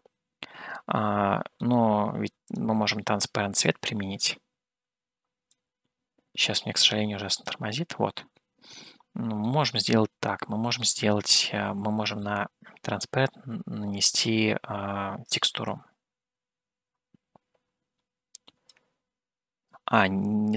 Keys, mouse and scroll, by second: 2.8 click, 8.9-10.0 middle drag, 10.2-11.2 shift+middle drag, 11.4 scroll down 1, 12.2-12.5 scroll down 1, 12.5-14.8 middle drag, 16.0-18.8 drag.